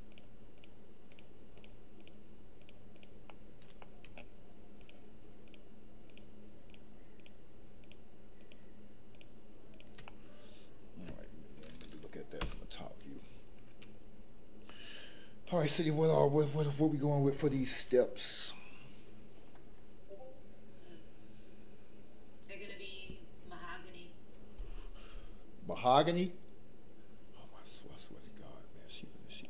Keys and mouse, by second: 0.5 shift+click, 1.5 shift+click, 3.2 shift+middle click, 3.8 middle click, 4.7 shift+click, 7.8 shift+click, 8.4 shift+click, 9.1 shift+click, 9.7 shift+click, 10.0 middle click, 12.4 KP_7, 14.6 click.